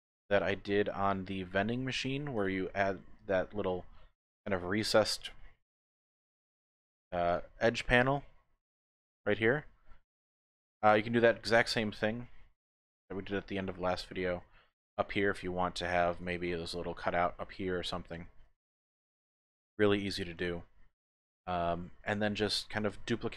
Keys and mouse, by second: 0.5 shift+middle click, 3.1 click, 3.3 typing, 3.5 middle click, 4.8 click, 5.6 KP_Decimal, 6.6 middle click, 7.3 click, 7.6 middle click, 10.0 click, 11.6 shift+click, 12.4 click, 13.0 shift+click, 14.5 shift+click, 14.8 middle click, 16.1 click, 16.1 typing, 16.4 Tab, 18.5 Tab, 18.7 click, 19.2 shift+middle click, 20.6 click, 21.4 shift+click.